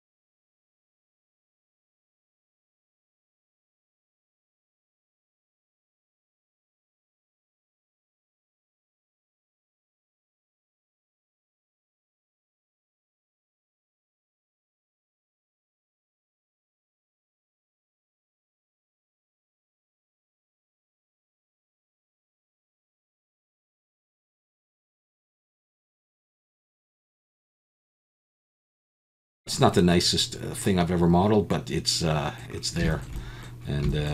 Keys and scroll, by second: 1.3 Tab, 1.5 Tab, 1.6 Tab, 2.0 alt+a, 2.1 Tab, 2.3 2, 4.4 x, 4.8 Tab, 4.9 Tab, 5.5 alt+a, 5.5-7.7 typing, 8.8-13.6 typing, 9.3 alt+a, 11.5 Tab, 11.7 Tab, 12.4 Tab, 12.5 alt+a, 12.7 Tab, 13.4 alt+a, 14.1 ctrl+shift+b, 15.3 shift+a, 15.6 e, 16.1 alt+a, 16.1 3, 16.2 x, 17.1 ctrl+b, 17.8 shift+a, 18.2 Tab, 18.3 alt+a, 19.4 Tab, 19.5 a, 20.5-20.9 typing, 21.9 Tab, 22.3 alt+a, 22.6 Tab, 22.8 alt+n, 23.1 alt+a, 23.2 Tab, 23.5 alt+a, 23.6 alt+n, 23.6 Tab, 23.8 Tab, 23.9 s, 24.0 y, 24.6 s, 24.6 x, 25.0 Tab, 25.7 ctrl+j, 26.2 Tab, 26.3 a, 26.6 m, 27.1 alt+a, 27.1 Tab, 27.5 alt+a, 28.4 Tab, 28.5 a, 28.7 s, 29.4 Tab, 29.4 alt+a.